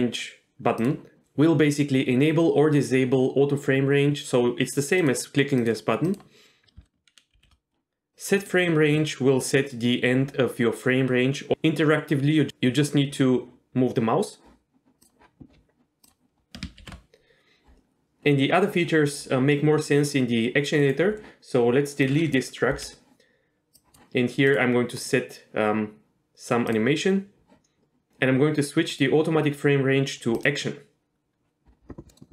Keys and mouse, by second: 5.0 click, 5.6 click, 6.1 click, 7.3 shift+f, 16.0-16.6 drag, 16.8 shift+F1, 22.1-22.5 drag, 22.8 Delete, 23.8 click, 24.5 click, 25.0-26.8 drag, 29.0-31.7 drag, 32.1 middle click.